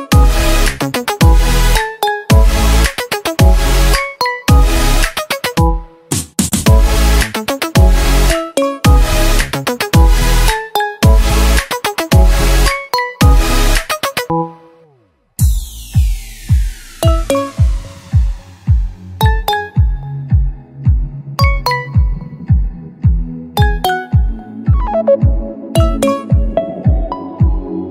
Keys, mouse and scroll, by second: 4.4 super+z, 8.2 super+z.